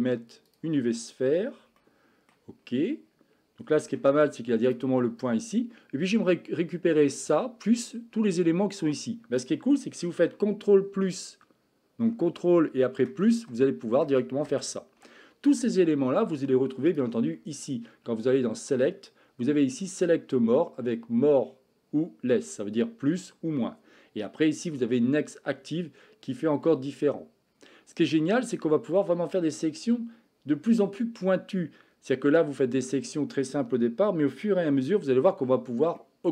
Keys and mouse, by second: 1.8-2.3 shift+middle drag, 3.9 Tab, 13.0 ctrl+KP_Add, 13.5 ctrl+KP_Add, 14.0 ctrl+KP_Add, 14.5 ctrl+KP_Add, 17.0-27.7 drag, 28.2 middle click, 36.0 middle click.